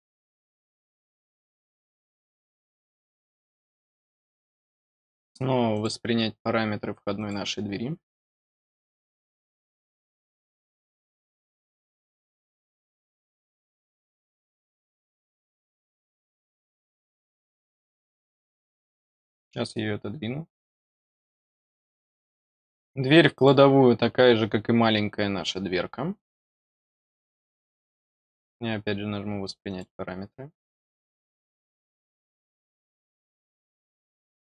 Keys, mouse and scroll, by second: 0.3 click, 0.7 right click, 2.0 click, 2.8 middle click, 3.6 middle click, 5.6 click, 7.1 click, 12.1 click, 15.1 click, 17.9 click, 20.6 click, 23.3 click, 28.1 click, 29.6 click.